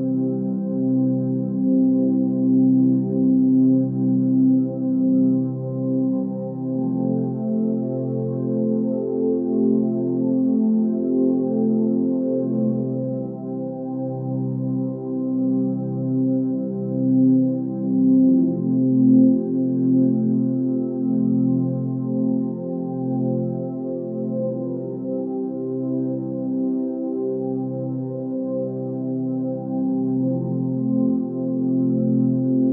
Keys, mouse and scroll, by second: 2.4 x, 3.3 ctrl+space, 11.2 ctrl+space, 18.8 ctrl+j, 22.5 click, 31.0 ctrl+t.